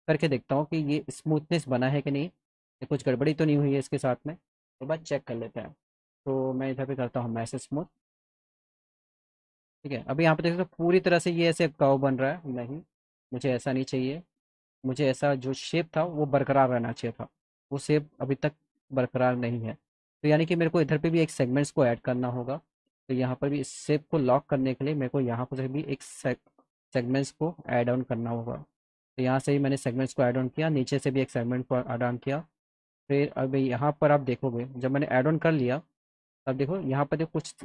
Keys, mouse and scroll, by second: 0.5 click, 1.4 click, 2.2 click, 3.0 click, 3.8 click, 6.9 m, 7.7 m, 8.4 click, 10.6 click, 11.2 click, 12.0 alt+middle click, 12.9 F3, 13.1 F4, 13.9 alt+click, 15.4 middle click, 19.6 click, 20.3 middle click, 22.8 click, 23.2 click, 24.3 click, 25.2 click, 26.6 click, 28.6 click, 32.0 middle click, 33.6 click, 34.1 middle click, 35.1 click, 35.9 click, 36.6 alt+middle click.